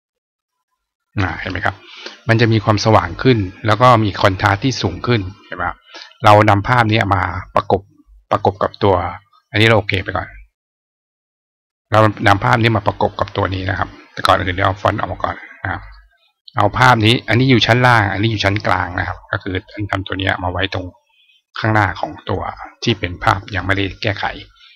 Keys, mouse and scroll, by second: 3.6 click, 6.5 click, 9.7 click, 11.9 click, 14.5-15.6 drag, 16.3 click, 19.6-22.2 drag, 24.6-24.7 drag.